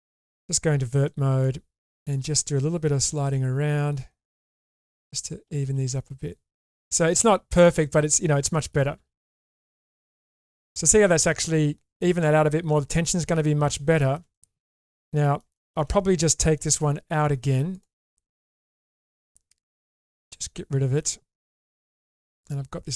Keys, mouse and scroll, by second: 0.8 1, 1.0 middle click, 2.0 click, 3.1 g, 5.1 click, 5.5 g, 7.8 middle click, 8.9 g, 10.6 click, 12.0-13.0 middle drag, 13.3 middle click, 14.0 shift+middle click, 14.3-15.4 middle drag, 15.5 shift+middle click, 16.6 2, 17.7 click, 18.5 middle click, 20.4 middle click, 21.9 ctrl+x.